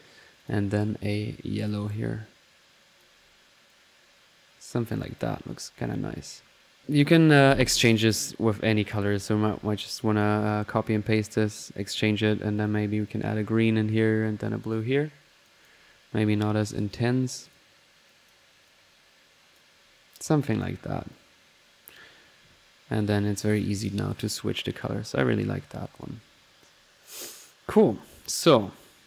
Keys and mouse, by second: 0.4 click, 1.1-3.2 drag, 3.7-5.5 drag, 5.8-6.5 drag, 7.9 click, 8.8 click, 9.6-10.3 typing, 10.0-11.1 ctrl+drag, 11.1-11.6 ctrl+drag, 11.8 click, 12.6 click, 13.1-13.7 drag, 13.9 click, 14.4-14.7 drag, 15.4 click, 16.1-16.9 typing, 16.3-17.1 drag, 17.4 drag, 18.1 click, 18.7-19.7 drag, 20.5 click, 21.1-22.2 drag, 23.4 click, 24.2 click, 28.0 click, 28.6-29.0 right drag.